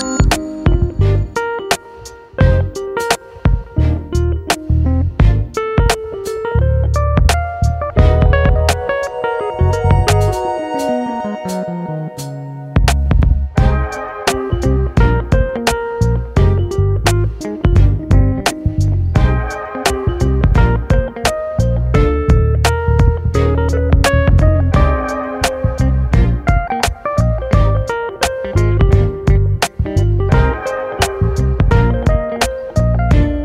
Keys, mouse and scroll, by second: 1.4 click, 1.6 click, 2.8 g, 3.7 scroll down 1, 3.9-5.8 middle drag, 5.8 click, 6.3 alt+s, 7.3-9.3 middle drag, 9.3 scroll down 1, 9.5 middle click, 9.8 KP_7, 10.3-10.8 scroll up 3, 10.8-11.2 scroll down 11, 11.4 shift+middle click, 11.8 alt+z, 11.9 middle click, 12.6-13.9 scroll up 10, 14.6 click, 15.4 alt+shift+click, 15.8 s, 17.3 KP_1, 18.2 shift+middle click, 19.0 g, 22.3 g, 23.9 click, 24.1 middle click, 24.9 alt+shift+click, 25.4 scroll down 2, 26.0 alt+shift+click, 26.5 alt+shift+click, 26.8 middle click, 27.1-27.7 scroll down 1, 27.7 shift+middle click, 28.5 alt+shift+click, 29.3 e, 32.7 click.